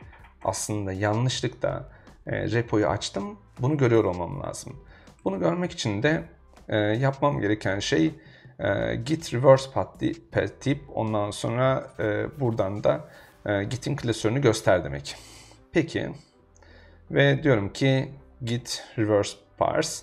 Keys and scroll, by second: 4.4 super+Tab, 15.3 super+Tab.